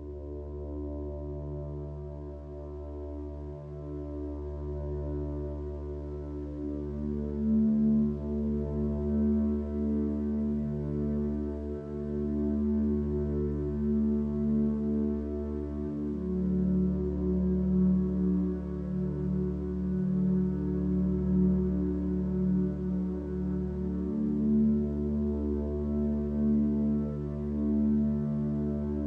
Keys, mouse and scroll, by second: 3.9 b, 7.6 ctrl+z, 11.7 click, 18.9 ctrl+z, 19.3 click, 25.3 ctrl+space, 28.3 click.